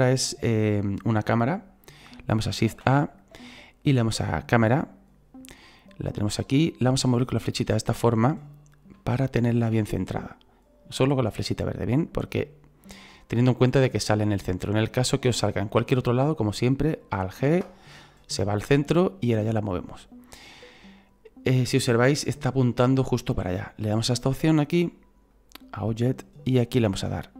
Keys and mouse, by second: 4.6 click, 6.4 click, 9.2 shift+middle click, 10.2 click, 11.7 click, 14.4 shift+middle click, 15.4 click, 18.9 click, 25.3 click.